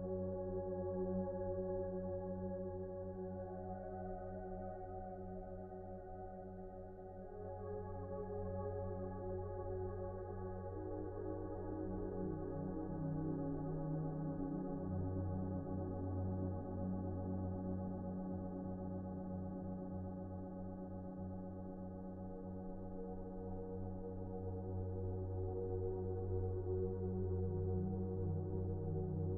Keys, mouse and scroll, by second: 1.4 F4, 1.7 2, 2.3 e, 3.0 Delete, 4.7 s, 6.5 s, 7.5 F4, 8.9 F4, 10.4 ctrl+z, 13.6 ctrl+z, 14.5 F4, 15.3 F4, 21.9 F4, 23.3 F4, 25.2 s.